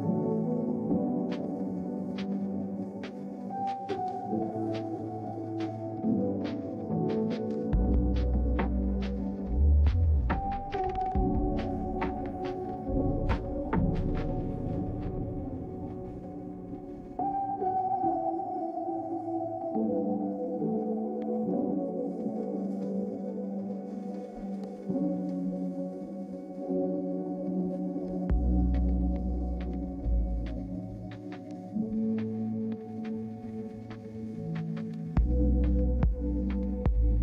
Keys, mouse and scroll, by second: 23.4-24.5 middle drag, 23.4-23.8 scroll down 2, 23.8-24.2 scroll up 2.